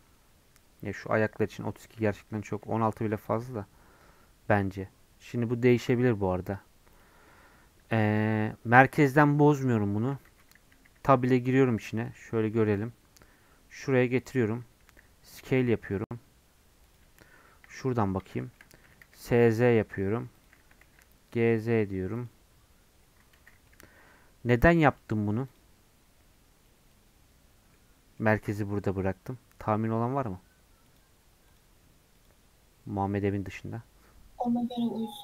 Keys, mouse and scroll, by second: 2.5 s, 7.7-10.1 scroll up 2, 10.3 Tab, 10.9 a, 11.9 alt+z, 12.8 g, 14.6-14.9 scroll up 1, 14.9 s, 17.4 KP_1, 17.9 scroll up 2, 18.3 shift+middle click, 18.8 s, 23.3 alt+z, 23.7 Tab, 25.5-28.6 right drag, 32.1-35.2 drag.